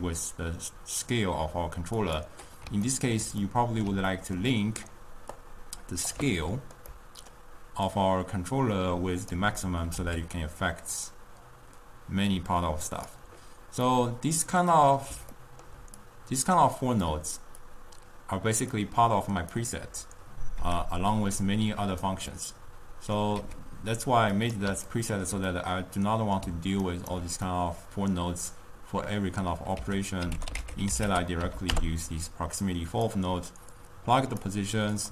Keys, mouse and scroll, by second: 3.2-5.4 ctrl+middle drag, 5.4 click, 7.0-8.2 ctrl+middle drag, 8.2-10.1 drag, 10.1 s, 14.3-16.3 middle drag, 16.3-21.0 drag, 21.0 x, 21.3 click, 22.4-23.5 middle drag, 23.5 g, 25.1-27.1 ctrl+middle drag, 27.1 ctrl+right click, 27.6-29.9 middle drag, 29.9 ctrl+a, 34.1-35.1 drag.